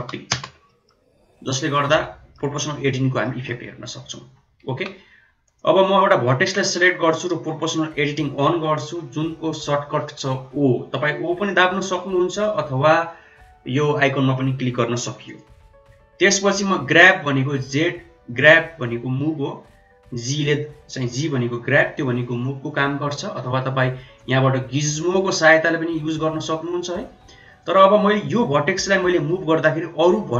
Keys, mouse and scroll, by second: 0.6 middle click, 1.7-2.2 middle drag, 3.1 middle drag, 3.8 Tab, 4.2 Tab, 4.6 1, 5.4 click, 15.2 click, 16.7 g, 24.2 click, 25.2-27.6 drag, 28.7 middle click.